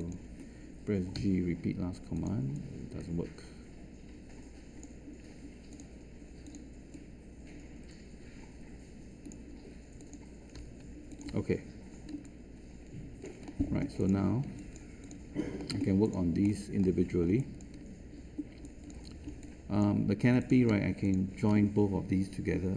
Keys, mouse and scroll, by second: 1.1 g.